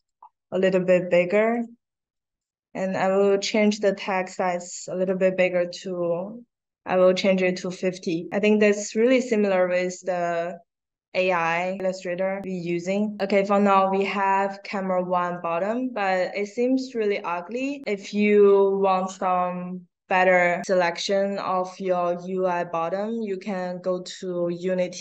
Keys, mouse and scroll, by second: 1.1-1.4 drag, 2.1 drag, 3.1 click, 4.7 click, 8.9 click, 11.7 click, 12.4-12.9 drag, 19.5 click.